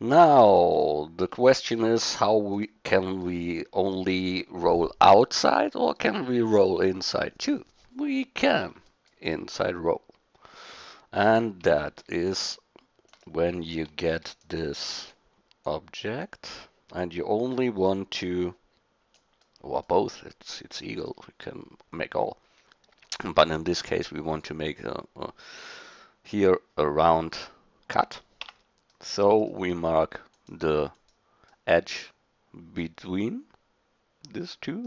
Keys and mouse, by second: 9.1-10.6 drag, 11.8 middle drag, 13.1 click, 14.1 shift+d, 14.3-17.0 drag, 17.6-19.4 drag, 19.4-19.9 middle drag, 20.9-22.8 drag, 22.8-23.2 middle drag, 23.2 drag, 28.4 Tab, 31.6 middle click, 32.8-34.8 middle drag.